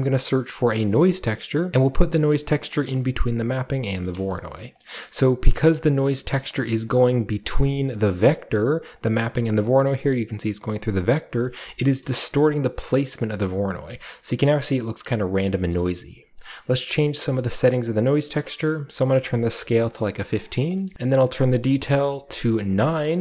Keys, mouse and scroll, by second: 0.9 click, 1.7 click, 2.7 click, 3.4 click, 3.8-4.7 scroll down 1, 4.7 click, 4.9-6.2 middle drag, 4.9 scroll down 1, 5.0-6.2 scroll up 1, 6.2 click, 7.6 shift+click, 8.9 click, 9.4 shift+click, 11.3 click, 11.9-12.7 drag, 12.0-12.7 middle drag, 12.9 shift+middle click, 13.0-14.5 shift+scroll up 1, 13.2 shift+middle click, 13.5 shift+middle drag, 13.9-16.2 shift+middle drag, 14.5-14.9 shift+scroll up 1, 14.9-16.4 scroll down 2, 16.4 scroll up 2, 16.9-18.3 scroll up 1, 18.3 scroll up 1, 18.4-19.5 drag, 19.5 typing, 20.3 click, 20.9-21.6 scroll up 1, 21.7 click, 22.3 typing, 22.7 click.